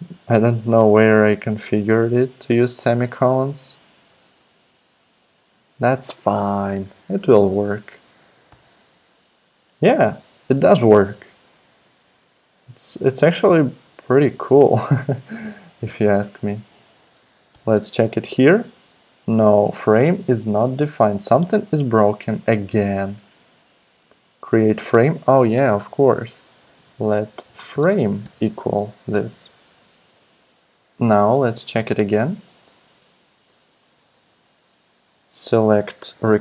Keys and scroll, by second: 8.5 alt+super+p, 11.6 super+z, 17.5 alt+super+p, 21.3 super+Tab, 25.5 super+Left, 26.3-29.0 typing, 29.2 super+s, 31.6 super+z, 32.2 super+z, 33.9 super+z.